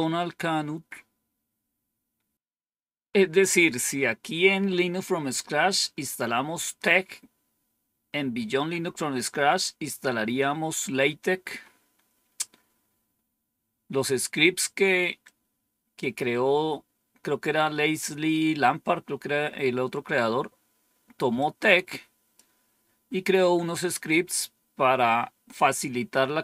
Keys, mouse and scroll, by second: 15.1 click, 21.3-22.3 drag.